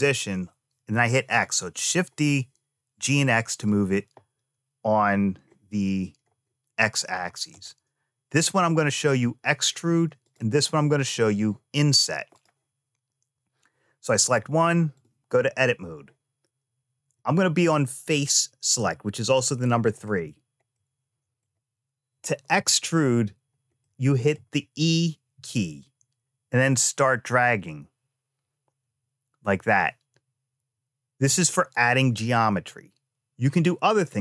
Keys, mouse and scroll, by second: 7.3 click, 10.0 click, 12.1 click, 13.8-14.8 drag, 17.0 click, 18.4 3, 19.7 click, 20.5 middle click, 23.6 middle click, 25.1 e.